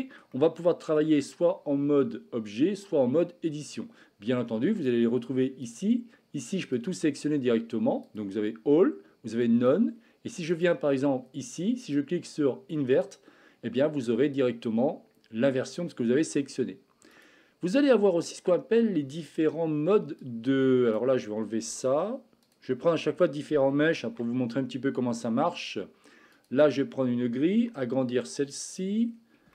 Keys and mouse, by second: 0.4-1.0 middle drag, 4.7 click, 5.7-6.9 drag, 8.0-9.6 drag, 10.5 click, 12.0-13.1 drag, 13.8-15.6 middle drag, 17.1 click, 17.7 middle click, 20.4-21.0 drag, 21.5 Delete, 22.5 click, 22.8 Delete, 24.0 shift+a, 27.6 s.